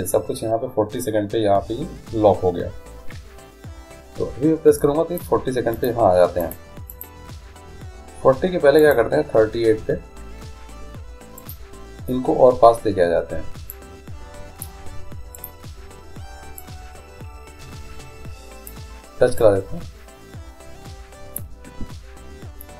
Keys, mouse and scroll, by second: 5.0-8.8 drag, 9.0-10.7 drag, 11.6-13.4 right drag, 13.9-15.7 drag, 15.5-17.4 right drag, 16.7-18.5 drag, 19.5-21.4 drag.